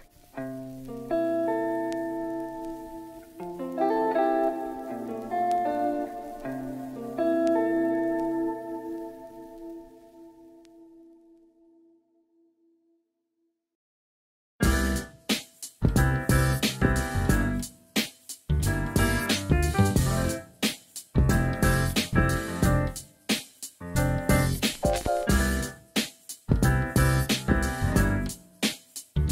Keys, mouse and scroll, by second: 0.5-2.6 drag, 7.0 shift+middle click, 7.8 e, 9.1-11.0 z, 11.9 click, 14.5 Tab, 14.8 Tab, 15.3 shift+middle click, 19.0 click, 23.2 click, 26.7 click, 28.4 KP_3.